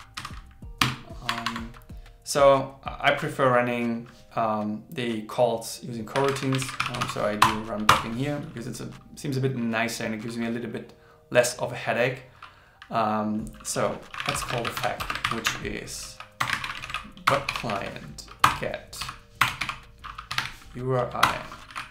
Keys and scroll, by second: 6.6 shift+b, 15.3 shift+o, 16.9 shift+c.